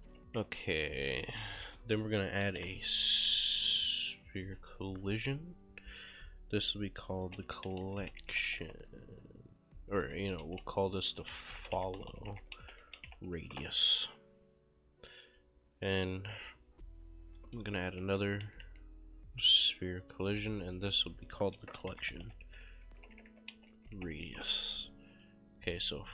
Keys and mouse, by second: 0.0 right click, 0.2 s, 0.4 w, 1.5 click, 2.2-3.6 typing, 5.0 click, 7.0-9.2 typing, 10.2-13.8 typing, 15.3 click, 17.7-18.7 typing, 20.7 click, 21.6-24.8 typing, 25.2 click.